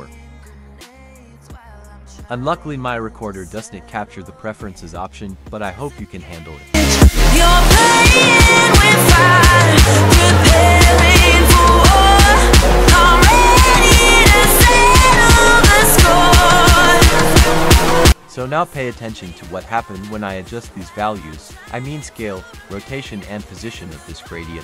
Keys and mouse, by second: 0.2 click, 1.1-1.8 drag, 10.5 click, 11.7-13.5 drag, 13.8-15.1 drag, 14.5 KP_0, 14.6 KP_0, 16.1-18.5 drag, 18.9-20.3 drag, 19.6 KP_0, 20.8-22.9 drag, 23.1-24.6 drag.